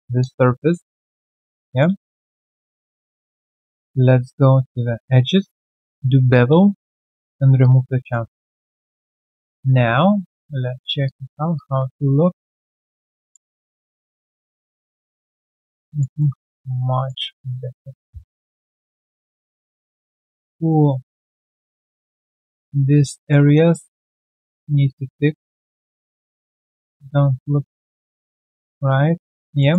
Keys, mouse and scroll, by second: 0.2 alt+click, 0.5 alt+middle click, 0.8 alt+right click, 1.1 alt+click, 1.4 alt+right click, 1.6 alt+click, 2.2 q, 2.5 alt+click, 3.3 ctrl+right click, 6.0 ctrl+b, 7.6 alt+click, 8.5 right click, 9.0 scroll down 2, 9.3 alt+click, 9.7 alt+click, 10.1 right click, 11.0 alt+click, 11.3 alt+right click, 11.5 alt+click, 11.8 alt+scroll down 1, 12.4 alt+middle click, 12.6 alt+right click, 12.9 alt+click, 13.1 alt+middle click, 13.6 alt+right click, 14.3 alt+click, 14.9 alt+right click, 15.3 alt+middle click, 15.5 alt+right click, 15.7 alt+click, 16.2 alt+middle click, 16.5 alt+click, 17.4 alt+click, 17.5 alt+middle click, 19.0 3, 19.3 alt+right click, 19.6 alt+middle click, 20.1 alt+click, 20.9 alt+middle click, 21.1 alt+click, 21.5 alt+middle click, 22.1 alt+click, 22.8 alt+click, 23.0 alt+middle click, 23.4 alt+right click, 23.8 alt+click, 25.0 alt+click, 25.1 alt+middle click, 27.0-27.3 alt+scroll down 1, 27.3 alt+middle click, 28.6 alt+click, 29.6 alt+middle click.